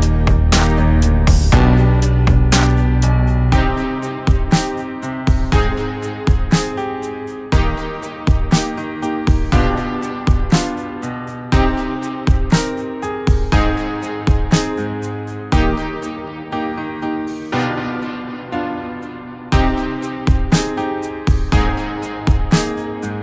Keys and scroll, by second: 4.5 ctrl+z, 8.7 ctrl+z, 9.8 [, 10.5 [, 11.1 ], 11.1 ], 18.1 ctrl+z, 19.0 ctrl+z, 20.5 [, 20.5 [, 20.7 ], 20.8 [, 22.0 ctrl+z, 22.6 ctrl+z.